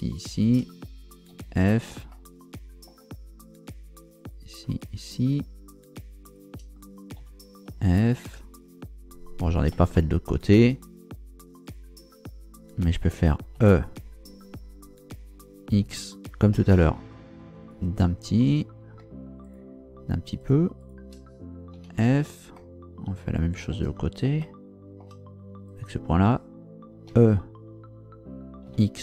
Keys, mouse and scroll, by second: 0.2 shift+right click, 1.3 f, 2.1 middle click, 4.2 right click, 4.8 shift+right click, 5.9 shift+right click, 6.3 shift+right click, 7.2 f, 9.9 shift+middle click, 11.6 right click, 13.5 e, 15.8 x, 17.7 ctrl+shift+click, 19.4 shift+right click, 20.4 shift+right click, 20.8 shift+right click, 21.7 f, 22.5-23.9 shift+middle drag, 24.4 shift+middle click, 25.7 right click, 27.1 e, 28.7 x.